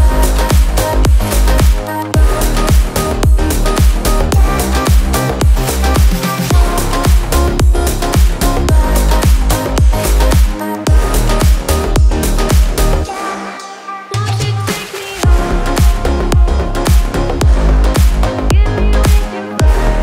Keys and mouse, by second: 0.6 n, 0.7 n, 8.0 Tab, 10.6 g, 14.4 a, 14.5 Tab, 15.4 Tab, 17.6 z, 17.8 a.